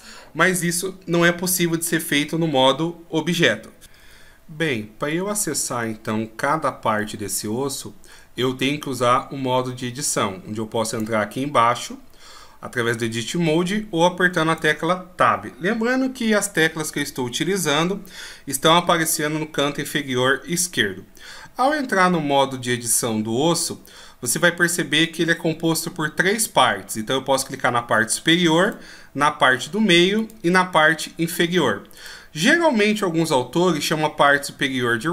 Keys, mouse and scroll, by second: 10.7 click, 14.3 Tab, 28.5 right click, 30.0 right click.